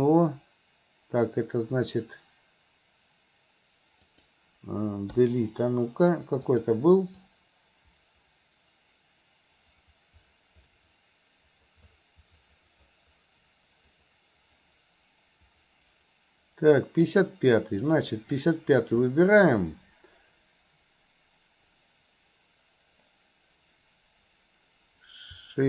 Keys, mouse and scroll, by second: 6.6 click, 7.3-17.2 drag, 17.8-18.4 drag.